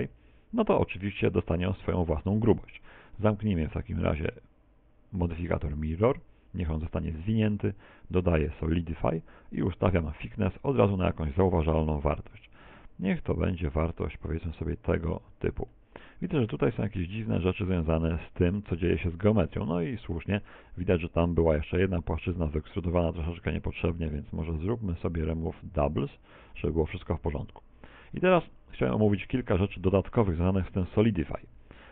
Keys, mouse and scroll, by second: 7.8 click, 9.4 middle click, 11.6 right click, 14.4 middle click, 17.8 click, 20.8 click, 23.8 click, 27.3 middle click, 28.4 scroll up 4, 28.9 middle click, 29.6 Tab, 31.6 g.